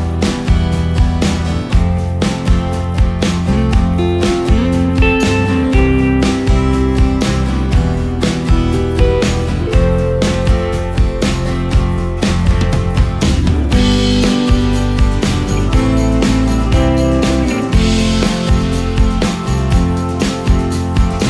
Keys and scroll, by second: 1.7 Up, 2.2 Up, 3.1 Down, 5.9 ctrl+space, 8.8 space, 9.3 space, 15.6 ctrl+v, 17.3 ctrl+space, 20.8 ctrl+space.